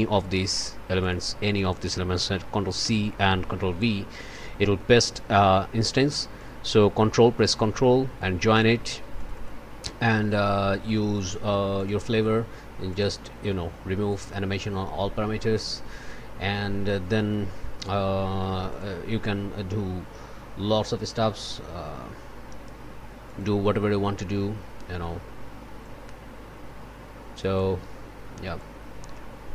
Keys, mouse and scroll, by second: 0.4 click, 1.0 click, 2.8 ctrl+c, 3.7 ctrl+v, 4.4-6.0 drag, 6.3-8.7 drag, 9.1 click, 11.7 click, 12.9 click, 14.1 click, 18.7 click, 23.2 click, 25.8-27.7 drag, 28.5-29.5 drag.